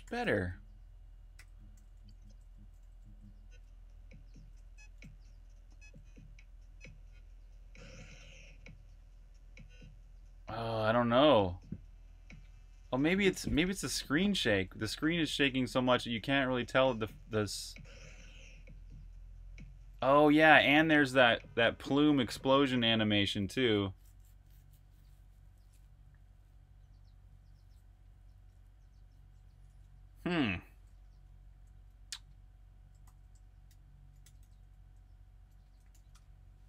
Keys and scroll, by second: 0.0-5.7 typing, 7.5-8.2 typing, 13.6-16.0 typing, 17.8 h, 22.4 super+q, 29.5 super+`, 31.0 ↻, 31.5 j, 32.8-36.1 typing.